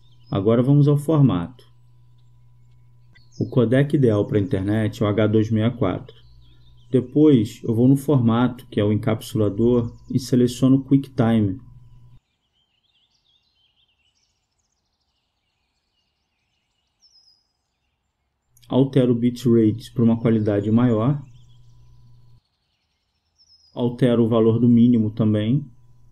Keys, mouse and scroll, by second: 0.0-6.5 drag, 8.4-10.3 drag, 12.1-14.7 drag, 19.3-21.0 drag, 21.0 KP_0, 21.2 KP_0, 25.0-26.1 drag.